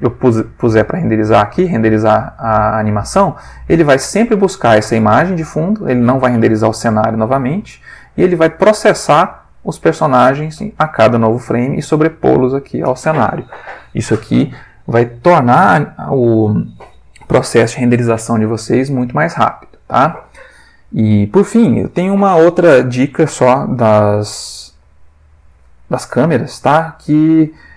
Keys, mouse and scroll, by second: 1.4 click, 4.1 click, 6.9 middle click, 7.7 middle click, 24.8 click, 26.0-27.0 ctrl+middle drag, 27.4 click.